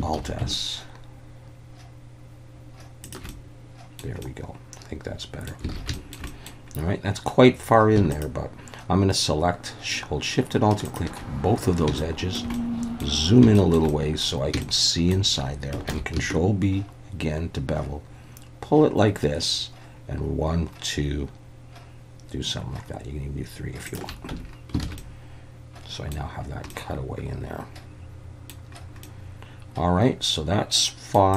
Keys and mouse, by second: 0.2 alt+s, 3.0 shift+click, 3.3 middle click, 4.2-5.5 middle drag, 5.8 alt+a, 5.9 shift+middle click, 6.3 middle click, 8.1 alt+shift+click, 12.0 shift+middle click, 12.5 middle click, 13.5 shift+middle click, 13.9 middle click, 14.6 shift+middle click, 15.9 ctrl+b, 23.9 shift+click, 24.3 Tab, 24.8 alt+a, 25.0-26.1 middle drag, 26.7-28.5 middle drag, 29.0-31.1 middle drag.